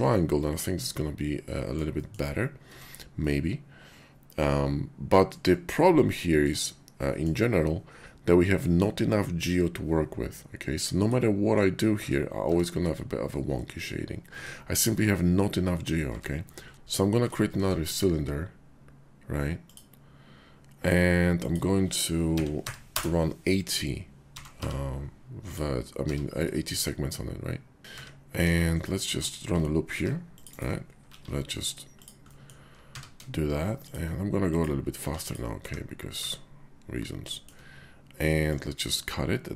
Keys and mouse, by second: 0.4-1.8 drag, 2.0 shift+drag, 2.7 Tab, 3.2-5.3 middle drag, 6.2 middle click, 7.0 middle click, 8.5 middle click, 10.7 middle click, 12.0 Tab, 12.4 Tab, 14.3 Tab, 16.1 Tab, 16.7 r, 16.7 x, 17.4 shift+a, 21.3-23.0 drag, 24.3 g, 24.6 y, 25.5 click, 26.0 r, 27.8 x, 27.8 `, 27.9 `, 28.4 KP_5, 29.0 Tab, 29.9 ctrl+r, 30.5 click, 31.0 ctrl+b, 32.0 click, 32.2 click, 32.8 q, 34.5 click, 34.9 q, 35.6 `, 36.2 `, 37.4 shift+click, 38.5-39.5 drag.